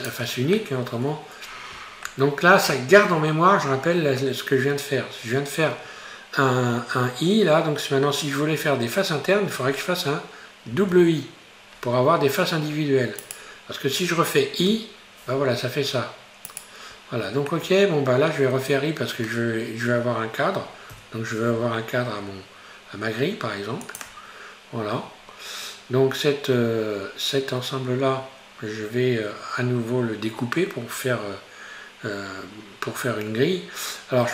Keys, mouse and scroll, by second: 0.6 middle click, 1.6-2.1 scroll up 1, 2.1-10.8 shift+middle drag, 17.5 middle click, 18.4-19.9 scroll down 1, 19.9-20.6 scroll up 1, 25.3-25.9 scroll up 1, 28.6-31.3 scroll down 1, 31.3-31.6 scroll down 1, 33.5-34.3 scroll up 2.